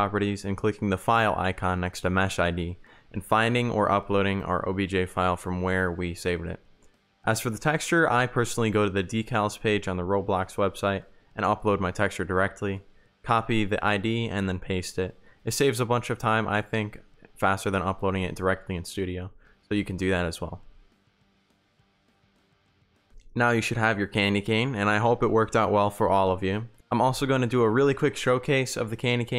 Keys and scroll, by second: 3.0 ctrl+v, 3.5 Return, 4.6-7.2 typing, 10.1 shift+a, 11.1 r, 12.4 d, 13.3 shift+w, 14.4 d, 14.8 a, 15.2 s, 16.0 d, 17.2 w, 21.6 d, 22.1 w, 22.5 s, 22.8 a, 27.4 a.